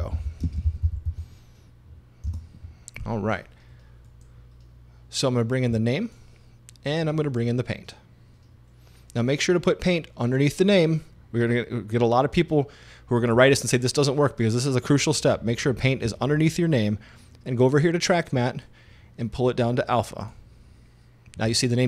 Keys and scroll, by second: 0.0-1.5 typing, 2.3 Return.